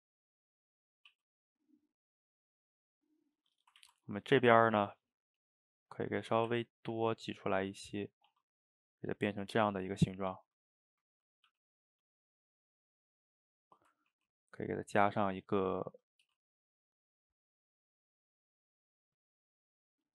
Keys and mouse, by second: 0.3 click, 0.5-1.1 middle drag, 1.1 e, 3.9 ctrl+z, 4.0-4.6 middle drag, 4.6 drag, 4.7-5.3 middle drag, 5.3 shift+click, 5.7 shift+click, 6.0 middle click, 6.5 e, 7.5 middle click, 8.3 s, 9.7-11.5 middle drag, 11.5 g, 12.7-14.2 middle drag, 14.2 ctrl+r, 15.6 middle click, 16.3 g, 19.2-20.1 middle drag.